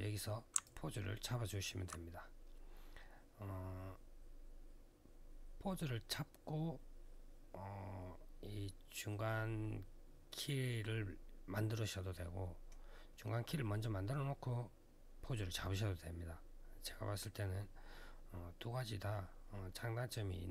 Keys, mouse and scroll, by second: 0.4 alt+click.